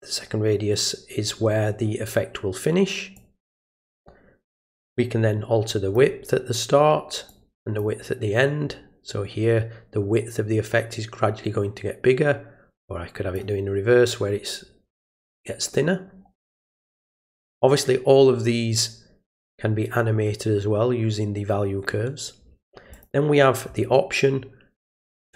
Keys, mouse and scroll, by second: 3.2 click, 4.8-5.9 drag, 7.3 click, 12.8 click, 22.9 click.